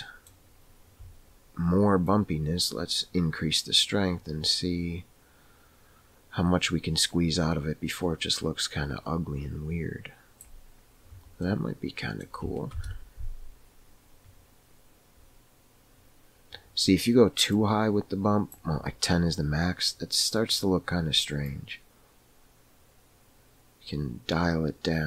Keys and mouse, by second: 2.1-11.3 drag, 13.5 KP_0, 17.6-19.2 drag, 21.4-25.0 drag.